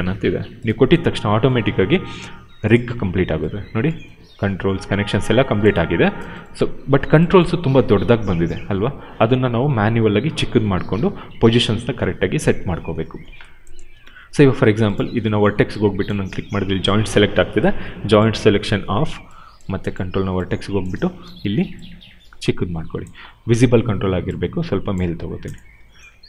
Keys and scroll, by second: 21.1 r, 23.4 w.